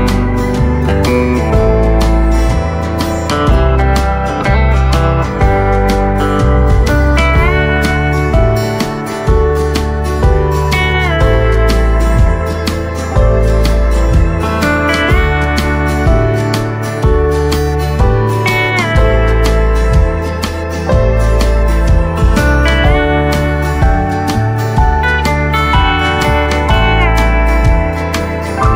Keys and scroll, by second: 4.7 v, 9.6 KP_Decimal, 9.8 KP_2, 10.0 KP_5, 10.3 Return, 17.4 KP_Decimal, 17.8 Return, 17.8 KP_5.